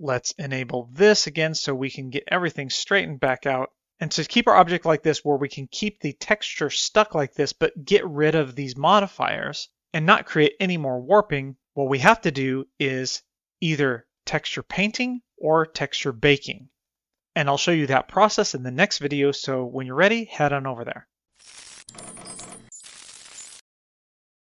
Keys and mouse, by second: 2.4-3.2 middle drag, 4.3-5.1 middle drag, 12.3-15.2 middle drag, 15.8-17.2 middle drag.